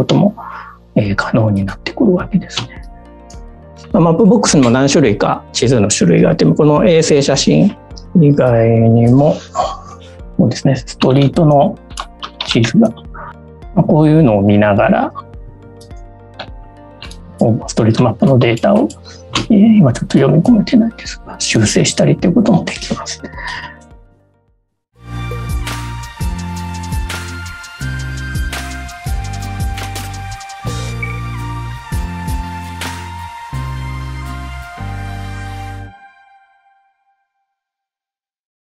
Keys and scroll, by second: 1.9 space, 11.0 space, 13.1 space, 18.1 space, 19.6 space, 20.1 space.